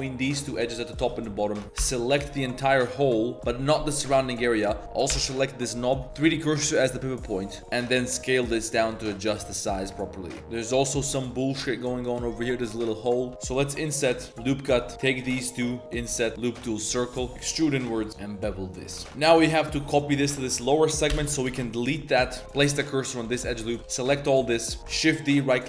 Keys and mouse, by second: 0.4 click, 0.6 z, 1.0 shift+click, 1.2 z, 1.4 click, 1.6 ctrl+KP_Add, 1.6 3, 1.8 ctrl+KP_Add, 2.8 click, 3.0 z, 4.2 click, 5.1 l, 6.0 s, 6.2-6.9 drag, 7.6 s, 9.3 Tab, 9.4-9.7 drag, 10.0-10.4 drag, 10.4 3, 13.3-19.0 typing, 14.3 ctrl+r, 15.1 shift+click, 18.1 ctrl+b, 19.0 ctrl+s, 19.0 Tab, 19.6 ctrl+shift+click, 20.4 alt+click, 21.1 ctrl+KP_Add, 21.4-25.6 typing, 22.6 alt+click, 23.0 alt+click, 24.6 click.